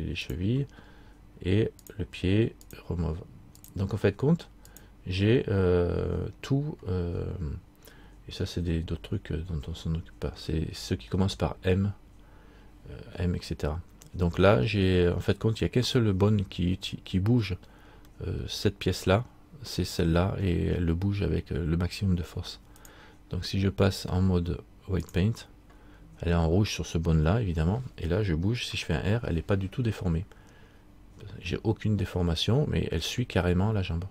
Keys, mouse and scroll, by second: 0.9-2.0 scroll down 1, 2.0 click, 3.8 click, 7.1-8.0 scroll down 1, 11.2-11.5 scroll up 3, 13.5-14.7 scroll up 8, 17.6-18.2 scroll down 1, 18.5 middle click, 22.9 click, 29.5 r.